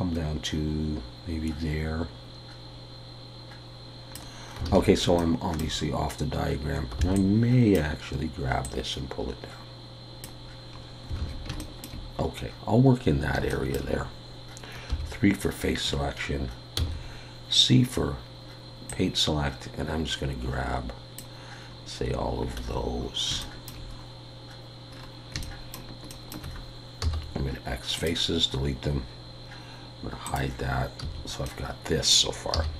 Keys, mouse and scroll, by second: 4.7 alt+a, 5.2 shift+middle click, 7.0 b, 8.6 click, 10.8 scroll up 2, 11.2 alt+a, 11.6 shift+middle click, 12.3-13.1 scroll down 1, 13.3 scroll down 1, 13.5 shift+middle click, 14.9 3, 16.0 scroll up 1, 16.8 c, 23.0-23.4 scroll up 2, 23.4 shift+middle click, 23.9-24.9 scroll up 2, 24.9-25.3 scroll down 5, 25.3 scroll up 1, 25.4 shift+middle click, 26.1 shift+middle click, 27.0 x, 28.5 scroll down 2, 30.3 click, 31.0 a, 31.5 middle click, 32.5 z.